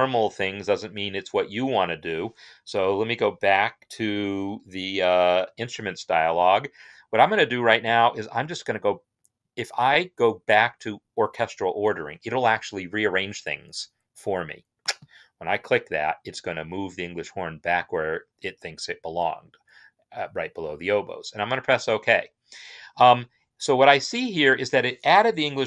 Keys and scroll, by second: 5.2 i.